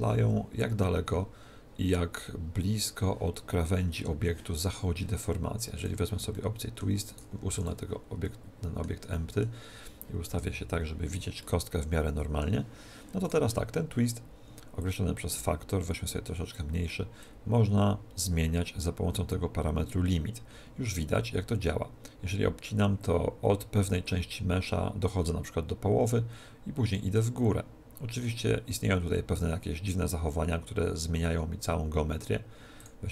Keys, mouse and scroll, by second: 5.8 click, 6.3-7.5 middle drag, 7.1 right click, 7.5 x, 8.8-11.1 middle drag, 10.3 KP_1, 11.4-13.2 middle drag, 13.2 right click, 14.8 click, 14.9 middle click, 15.2 click, 17.2 click, 32.8-33.1 drag.